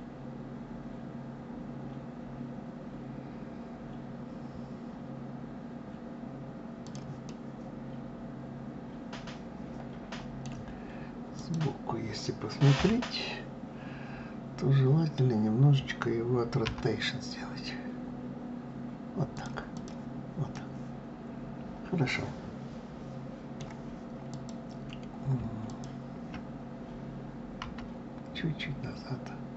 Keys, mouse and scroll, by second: 6.9-9.9 middle drag, 11.0 click, 12.4 KP_3, 19.4 click, 20.1-23.2 middle drag, 23.9 click, 25.3 shift+click, 27.2 g.